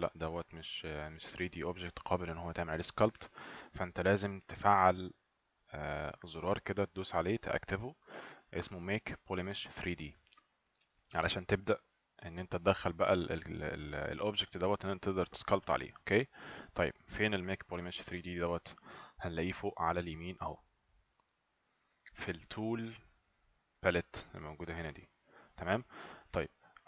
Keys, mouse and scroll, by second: 18.3 click.